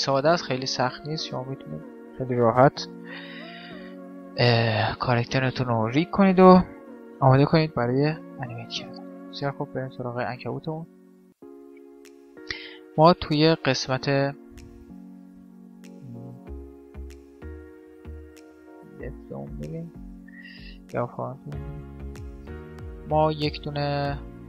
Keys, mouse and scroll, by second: 1.0 x, 2.6 n, 3.5 middle click, 5.0-6.8 drag, 6.6 n, 7.2-9.5 middle drag, 7.8 KP_5, 9.5-11.5 drag, 9.8 middle click, 15.5 middle click, 15.6 KP_5, 15.8 KP_1, 17.3-19.0 drag, 18.9 z, 19.0 middle click, 23.3 shift+a, 23.7 middle click.